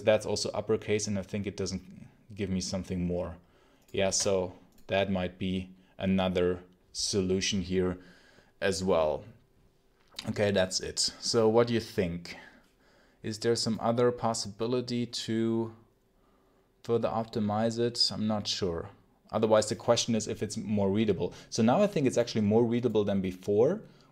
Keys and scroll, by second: 3.9 shift+Escape.